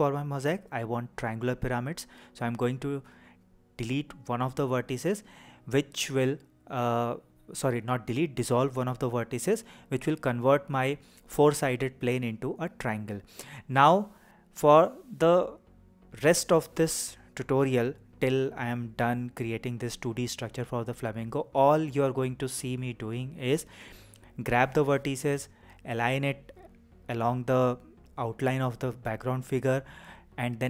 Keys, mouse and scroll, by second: 5.3-7.6 right drag, 10.5-10.9 scroll down 1, 10.9-11.7 scroll up 2, 11.7-12.6 scroll down 1, 12.7 shift+middle click, 15.5 click, 19.9 g, 25.1 click, 26.5-27.6 shift+middle drag, 28.6 click, 29.8 g.